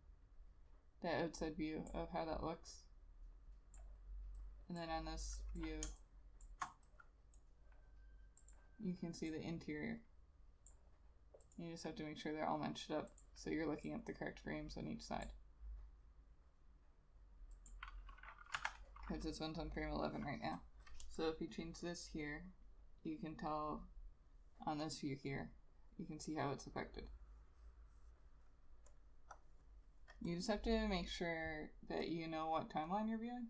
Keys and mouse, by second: 6.0 space, 18.7 F6.